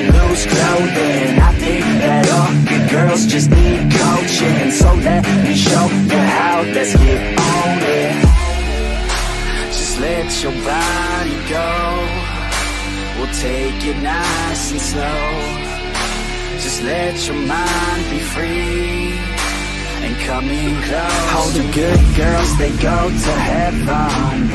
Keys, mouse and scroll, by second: 3.1 click, 6.5-9.3 drag, 16.2 middle click, 20.7 click, 21.6-24.1 drag.